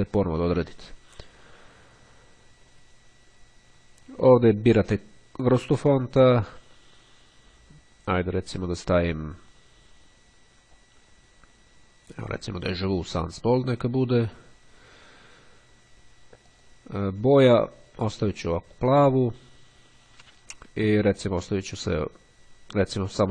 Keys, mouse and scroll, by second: 4.7 click, 6.5 click, 8.3 click, 9.5-11.1 scroll down 2, 13.0 click, 14.4 click, 16.3 click, 17.9 click, 20.0-20.7 scroll down 2, 20.7-22.1 scroll down 1, 22.1-23.3 scroll down 1.